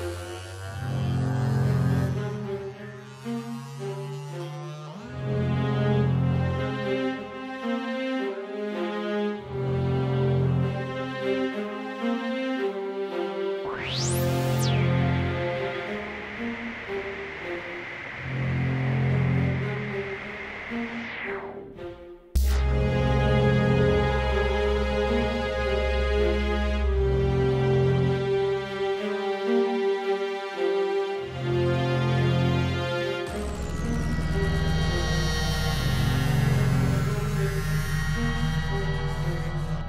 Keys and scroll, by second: 2.9 super+d.